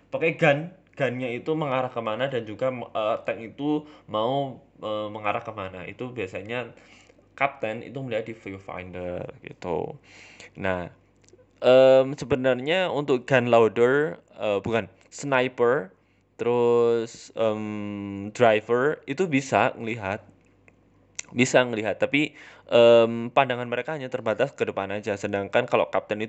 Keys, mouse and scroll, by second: 1.0 middle click, 1.2-1.9 scroll up 2, 1.9 KP_7, 2.1 z, 3.4 shift+s, 4.0 shift+middle click, 4.3 Tab, 4.7 Tab, 4.9 shift+a, 5.9 s, 7.1-7.5 scroll up 4, 7.3 shift+middle click, 7.8 g, 8.7 s, 9.7 middle click, 10.3 g, 11.7 KP_7, 13.1 click, 14.8 click, 19.1 Tab, 19.3 middle click, 19.6 right click, 19.7-20.1 scroll down 7, 20.3-20.9 scroll up 3, 21.0 right click, 21.2 g, 21.7-22.6 scroll down 6, 21.8 middle click, 22.2 shift+middle click, 22.6 KP_1, 23.1 middle click, 23.5 scroll up 3, 23.8 shift+a, 25.2-25.5 scroll down 3, 25.5 KP_1, 25.9 shift+middle click.